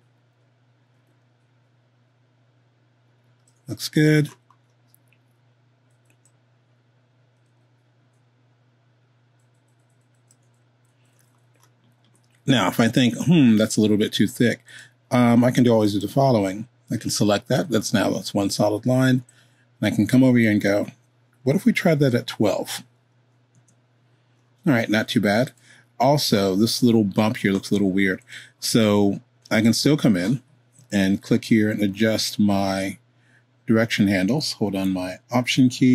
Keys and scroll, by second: 21.9 1, 23.5 Home.